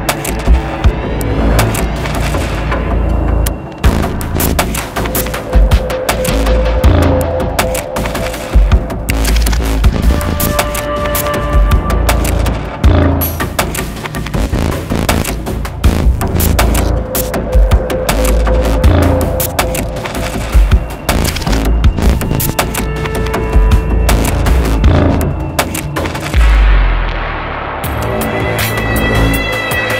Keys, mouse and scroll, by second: 2.9 alt+scroll up 1, 4.8 alt+scroll, 4.8 alt+scroll down 1, 5.3 alt+scroll up 1, 6.1 alt+scroll down 1, 9.5 double click, 12.8 double click, 14.5-16.4 typing, 19.6 shift+i, 20.2 right click, 22.9 right click, 25.7 right click, 27.2 double click.